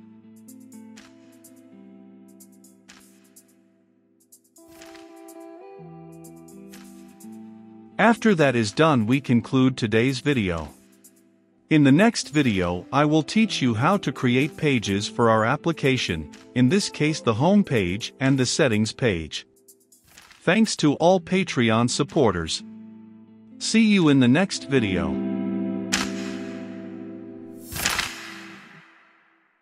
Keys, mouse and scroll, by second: 0.2 ctrl+v, 1.5 click, 2.2 Return, 3.5-5.9 scroll up 1, 5.9 scroll up 1, 6.2-18.7 drag.